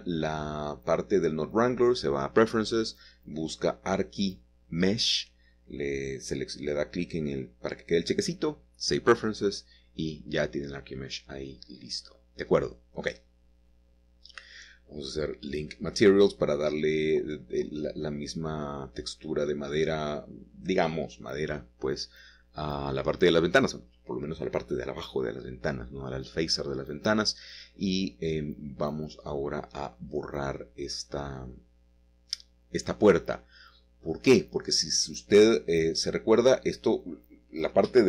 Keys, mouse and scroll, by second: 0.4 middle click, 4.2-6.0 scroll down 2, 5.3 middle click, 6.1 shift+middle click, 7.0 shift+click, 10.3 click, 11.4-11.9 scroll down 1, 11.9-15.5 middle drag, 15.3-15.8 scroll up 2, 16.1 shift+middle click, 17.0-18.2 scroll down 1, 18.3-19.4 scroll up 1, 19.3 click, 20.1 click, 21.3 x, 21.9 click, 22.9 click, 24.8 click, 25.4-26.6 scroll down 1, 26.8-27.8 scroll up 2, 27.8-28.2 scroll up 1, 28.2-29.2 scroll down 2, 29.2 scroll down 1, 29.5 click, 30.4 Tab, 30.7-31.1 scroll up 1, 31.4 shift+middle click, 35.0 click, 36.1 Tab, 36.7 click, 37.7 x.